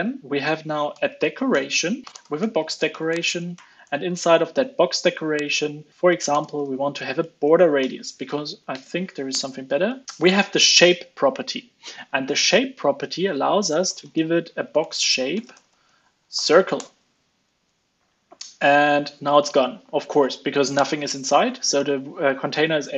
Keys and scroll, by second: 4.1 ctrl+space, 8.6 alt+BackSpace, 8.7 ctrl+space, 17.5 super+s.